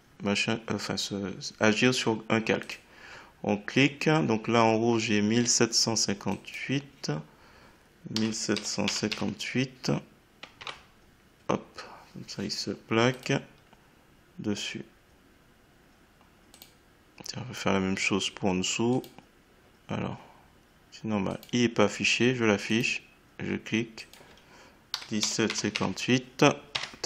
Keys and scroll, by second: 8.1 1, 9.1 8, 10.5 Tab, 24.9 1, 26.7 Tab.